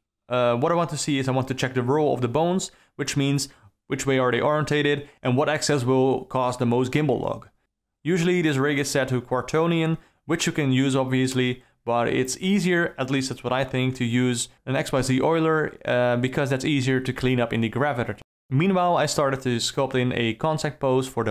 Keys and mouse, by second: 0.1 click, 0.4 click, 1.0 click, 1.3 alt+middle click, 1.7 click, 2.1 click, 2.4 click, 2.7 click, 3.1 click, 3.4 click, 3.9 click, 4.4 click, 4.8 click, 5.0 click, 5.4 click, 6.0 click, 6.5 click, 7.2 alt+r, 8.3-9.8 alt+middle drag, 12.0-12.6 alt+middle drag, 13.2-13.5 alt+middle drag, 14.9 r, 16.4 r, 17.9-18.4 alt+middle drag, 19.0 ctrl+middle click, 19.7 drag, 20.6 r.